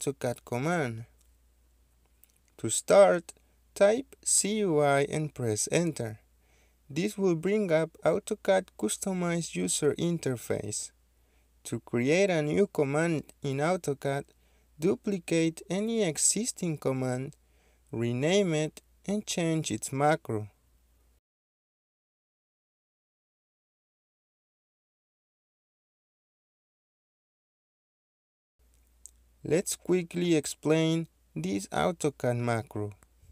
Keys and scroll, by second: 0.6-1.0 typing, 3.1 Return, 7.4-8.2 typing, 10.0-11.4 typing, 16.1-16.8 typing, 19.6-21.4 typing, 23.8-25.2 typing, 28.6 ctrl+z.